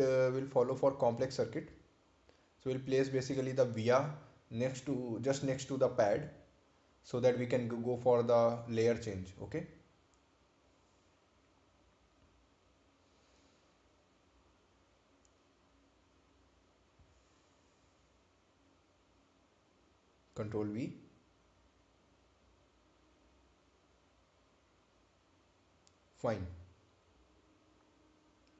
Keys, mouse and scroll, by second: 1.1-1.6 scroll down 1, 2.3 scroll up 1, 3.1 scroll down 1, 4.1 click, 5.9 click, 10.1 ctrl+click, 13.2 ctrl+click, 13.7 scroll down 1, 14.6 scroll up 1, 16.3 click, 17.4 ctrl+click, 19.2 ctrl+v, 20.5 click, 23.8 scroll down 1, 25.4 scroll up 1, 27.1 scroll down 1.